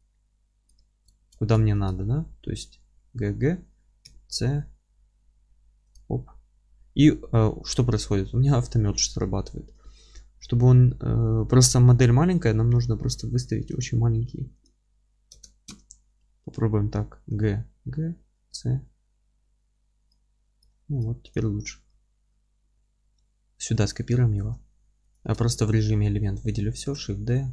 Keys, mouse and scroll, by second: 0.8-1.2 scroll up 1, 1.2 ctrl+z, 2.3 g, 5.9 click, 8.0 ctrl+z, 16.6-20.1 middle drag, 17.2 g, 20.1 click, 20.7 alt+middle click, 21.3 click, 21.8 g, 22.7-25.1 middle drag, 23.8 alt+q, 25.1 click, 25.2 Tab, 25.7 a, 26.8 shift+d.